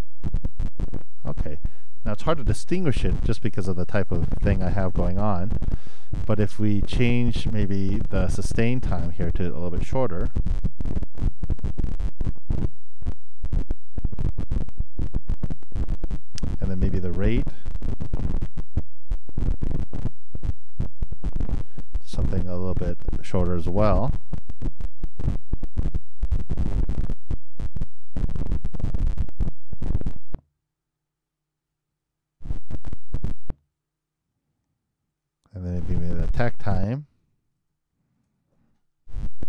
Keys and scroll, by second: 12.6 super+3, 13.1 super+Return, 24.9 super+i, 25.1 super+Return, 29.0 super+3, 29.2 super+Return.